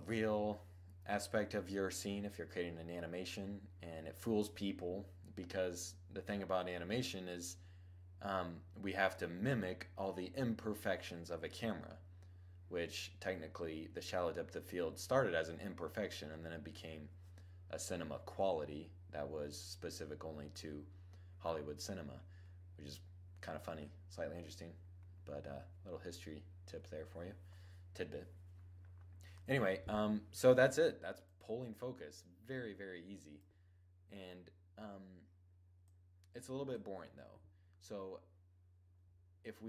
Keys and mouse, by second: 30.7-32.4 drag, 35.3-37.3 drag, 38.8-39.6 middle drag.